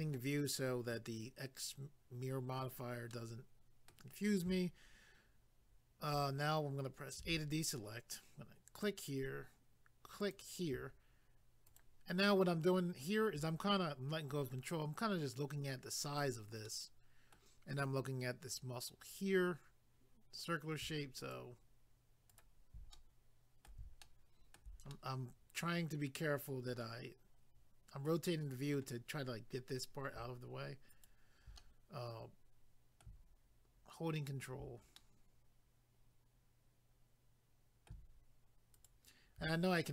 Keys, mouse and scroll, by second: 3.1 middle click, 7.2 a, 8.8 click, 10.2 click, 11.7 ctrl+right click, 16.7 middle click, 21.2 ctrl+right click, 22.9 middle click, 24.0 shift+middle click, 24.9 middle click, 30.9 ctrl+right click, 31.6 middle click, 34.2 ctrl+right click, 35.0 middle click, 38.8 ctrl+right click.